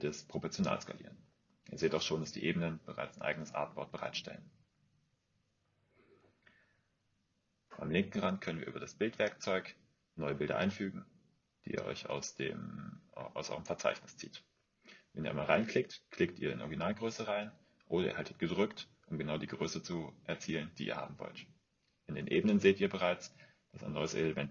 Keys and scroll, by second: 15.8 typing.